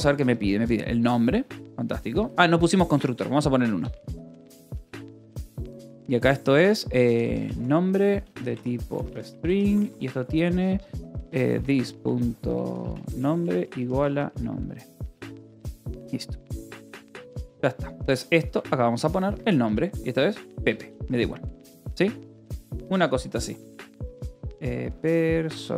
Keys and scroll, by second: 0.0-0.1 typing, 1.9 k, 3.4-9.2 typing, 3.6 Return, 9.6 Return, 10.3-14.4 typing, 15.7 j, 17.8-23.5 typing, 21.4 ctrl+s, 25.3-25.7 typing.